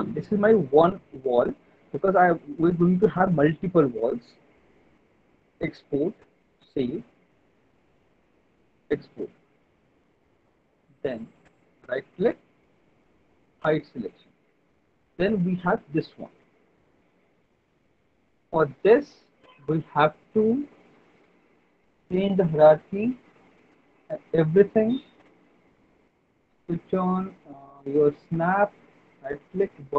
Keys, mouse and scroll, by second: 8.5 click, 10.6 alt+middle click, 12.2 click, 13.7 click, 14.5 alt+middle click, 15.1 click, 16.4 alt+middle click, 17.0 click, 18.0 click, 18.4 w, 19.6 click, 21.9 click, 23.1 click, 24.0 alt+middle click, 24.6 middle click, 25.0 alt+middle click, 25.6 middle click, 26.8 click, 27.9 click, 29.1 right click.